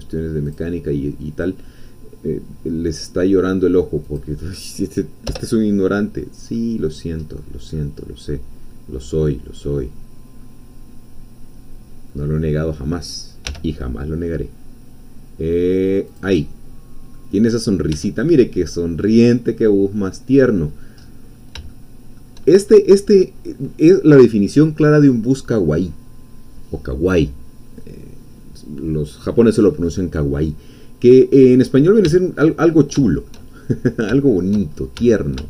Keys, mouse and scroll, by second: 0.5 click, 4.0-5.3 drag, 5.3 Return, 6.5 middle click, 7.4 scroll down 2, 7.7-13.5 middle drag, 13.5 e, 16.1-17.3 drag, 16.4 middle click, 17.5-17.9 scroll down 2, 18.0 Tab, 18.4 click, 19.0 middle click, 19.9-20.6 scroll up 2, 20.6-21.0 scroll down 2, 21.0-21.5 scroll up 1, 21.7 shift+click, 22.6 shift+scroll down 1, 31.4 scroll up 1, 31.7-32.0 scroll down 1, 32.1 shift+click, 32.4 shift+middle click, 32.6-32.9 shift+scroll up 2, 33.1 shift+click, 33.6 shift+middle click, 33.8 click, 33.9 shift+middle click, 34.7-35.0 shift+scroll up 2, 34.9 shift+Tab.